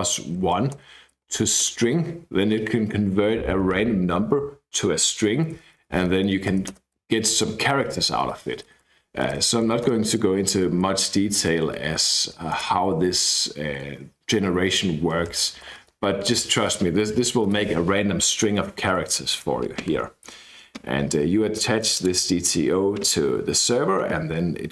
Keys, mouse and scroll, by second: 0.0-1.7 typing, 0.1 Right, 5.4-6.6 typing, 8.2-9.6 typing, 9.8 Return, 10.9 Left, 11.0 Left, 11.2 Left, 11.8 Right, 11.9 shift+s, 12.5 Return, 15.0-16.2 typing, 17.5 BackSpace, 19.8-20.5 scroll down 1, 20.8-21.8 scroll up 1, 21.8 click, 22.5-23.0 scroll down 1, 23.0-23.5 scroll down 1.